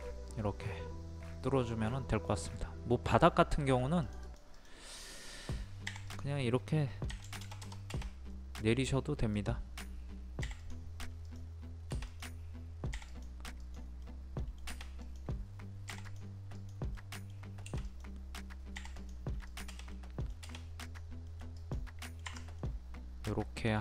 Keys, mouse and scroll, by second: 3.2 scroll up 1, 3.5 middle click, 4.0-5.6 drag, 5.9 p, 6.1 click, 7.1 KP_2, 8.1 scroll up 1, 8.3 middle click, 8.8-9.3 scroll up 1, 9.3 click, 10.4 click, 10.4 p, 10.6-14.0 drag, 14.0 middle click, 15.0 click, 16.9 middle click, 17.8 click, 19.9 middle click, 20.3-20.6 scroll down 1, 20.8 click, 21.2 middle click, 21.5 click, 22.0 middle click, 22.2 Escape, 22.6-23.8 middle drag.